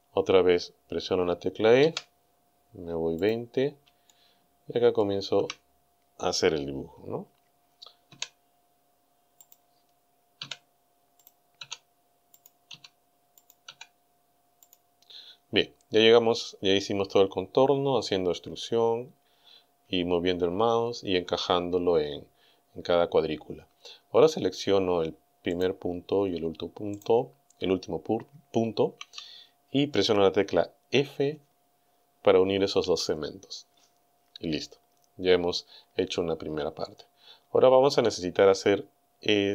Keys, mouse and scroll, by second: 1.8 e, 3.2 click, 4.1-5.2 shift+middle drag, 8.1 e, 9.5 click, 10.5 e, 11.2 click, 11.6 e, 12.4 click, 12.7 e, 13.5 click, 13.7 e, 14.7 click, 25.6 right click, 27.0 shift+right click, 32.8 f.